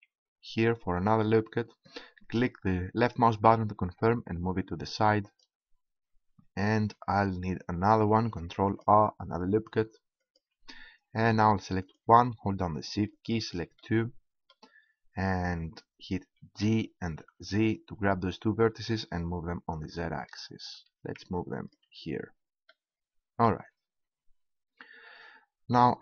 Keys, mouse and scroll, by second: 6.2-7.6 drag, 8.2 ctrl+r, 10.2-12.3 drag, 12.3-15.0 right drag, 16.4 g, 22.1-23.6 drag.